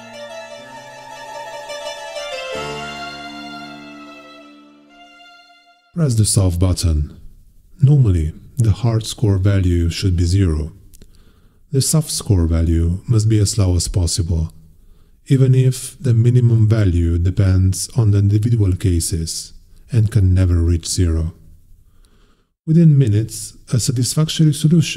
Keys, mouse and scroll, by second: 0.0-0.7 scroll down 4, 1.7 click, 3.0 click, 5.8 click, 11.9 click, 15.0 click.